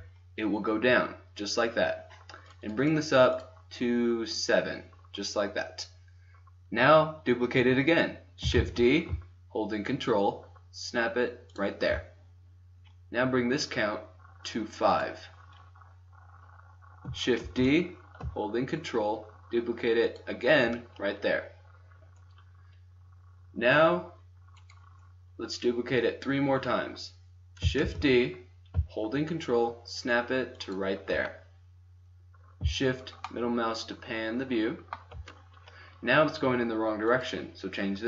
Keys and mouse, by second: 2.5-5.2 drag, 5.4-7.0 middle drag, 7.5 middle click, 8.6 shift+d, 14.4-17.2 drag, 17.5 shift+d, 24.6-26.6 right drag, 26.6 middle click, 27.9 shift+d, 33.3-35.3 middle drag, 37.0-38.0 middle drag.